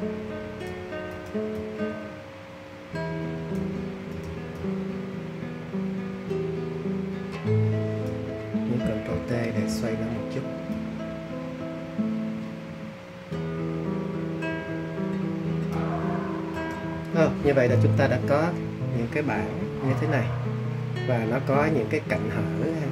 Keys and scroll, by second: 9.1 super+t.